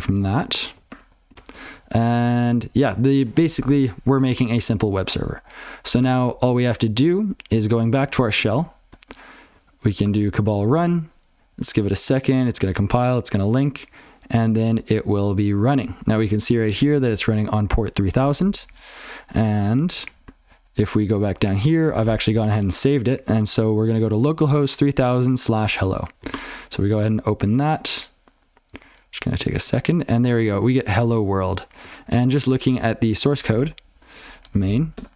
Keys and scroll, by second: 19.7 alt+x.